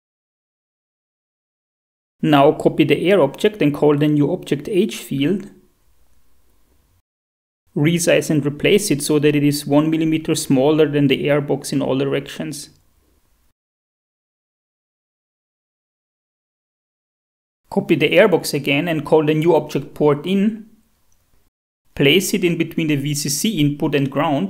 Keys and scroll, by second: 0.5-1.4 typing, 4.7 ctrl+c, 5.0 ctrl+v, 5.7 F2, 6.4-7.6 typing, 12.2 Up, 12.4 Tab, 14.0 Down, 19.2 ctrl+c, 19.4 v, 20.5 F2, 20.9-22.2 typing.